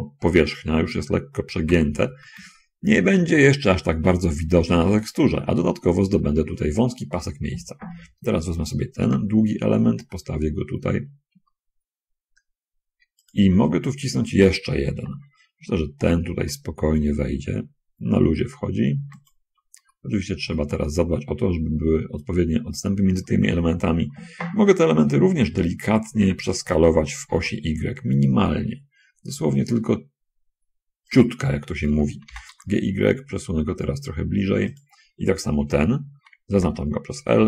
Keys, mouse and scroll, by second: 1.9 g, 2.2 y, 5.4 shift+click, 8.2 l, 9.3 g, 13.4 shift+click, 15.2 l, 16.2 g, 19.2 shift+click, 20.1 shift+middle click, 20.8-22.0 shift+drag, 22.2 middle click, 25.8 l, 27.6 s, 28.0 y, 31.2 click, 32.6 g, 32.8 y, 35.0 click, 36.8 l.